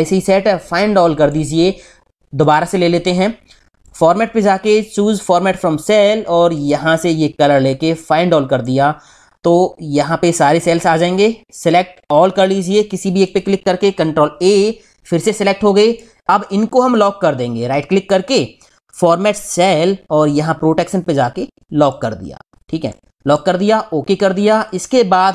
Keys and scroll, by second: 14.1 ctrl+a.